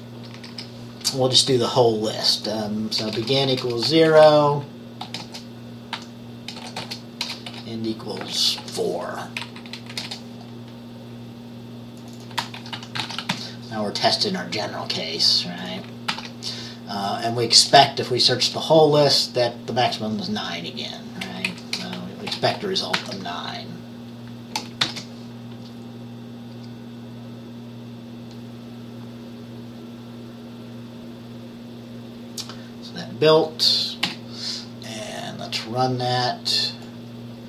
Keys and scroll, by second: 0.5 Up, 0.6 Up, 3.1-10.1 typing, 10.0 Left, 12.5-13.9 typing, 16.2 ctrl+s, 21.6 Right, 21.9 BackSpace, 22.4 9, 23.0 ctrl+s, 24.9 ctrl+b, 34.1 F5.